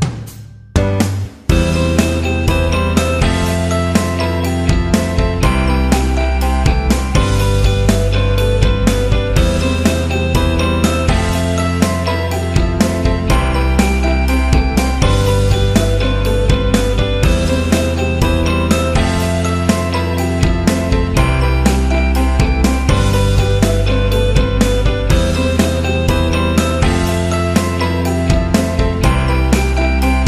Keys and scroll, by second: 0.4 ctrl+t, 2.5 Return, 4.4 Return, 7.1 v, 9.7 ctrl+t, 13.8 Return, 29.4 c.